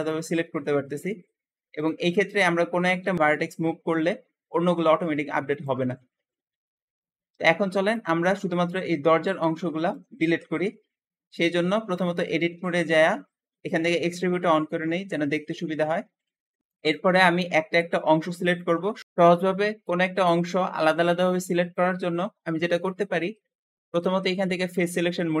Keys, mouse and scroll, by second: 0.3-1.6 scroll up 1, 1.6 click, 2.1 alt+a, 2.9 b, 3.0 b, 3.1 g, 3.2 g, 7.0 ctrl+z, 7.6 alt+z, 7.7 alt+z, 7.8-10.8 alt+middle drag, 10.4 Escape, 11.9 Tab, 12.0 Tab, 12.4 Tab, 12.5 Tab, 14.0 alt+z, 14.1 alt+z, 16.6 shift+middle click, 17.0-17.4 scroll up 1, 17.4 shift+middle click, 18.3 shift+click, 24.1-25.4 drag.